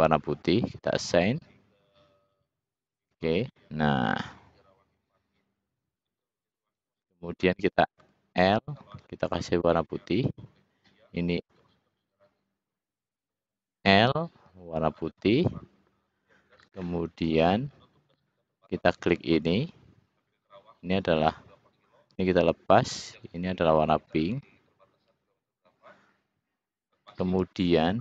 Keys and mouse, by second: 2.7-6.8 drag, 6.4 middle click, 8.0 l, 11.6 l, 12.5 click, 13.3 l, 18.9-20.8 drag, 22.0 click, 25.4-26.6 drag, 26.7 click.